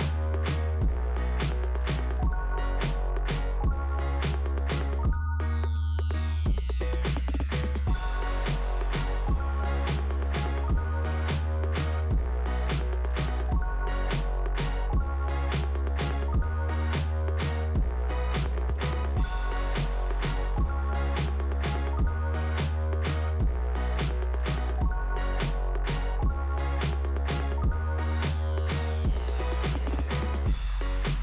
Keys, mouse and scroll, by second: 0.6 click, 2.2 click, 2.7 click, 3.1 click, 3.2 double click, 3.4 double click, 3.7 double click, 3.8 double click, 4.9 double click, 10.0 click, 14.3 click, 15.1-15.4 scroll down 1, 17.5 middle click, 19.4 click, 21.2 click, 23.2 click, 25.7 scroll down 1, 28.2 click, 28.9 click.